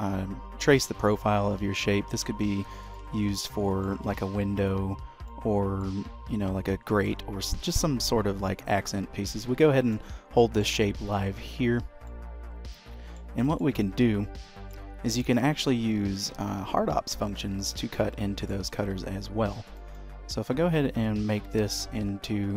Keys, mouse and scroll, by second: 3.5 middle click, 5.1-5.6 scroll down 3, 5.4 middle click, 12.2 middle click, 13.6 shift+middle click, 13.9 middle click, 15.7 shift+a, 18.1 middle click, 18.9 s, 20.1 middle click, 21.1 s.